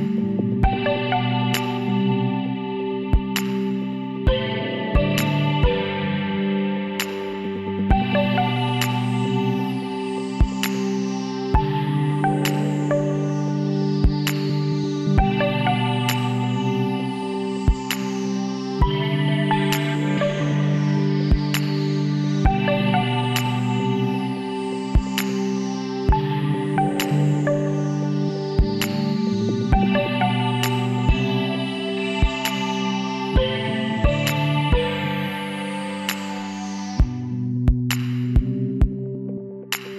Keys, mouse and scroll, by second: 2.4 s, 6.0-7.6 right drag, 6.9 b, 8.6 g, 31.3 g, 38.0 g.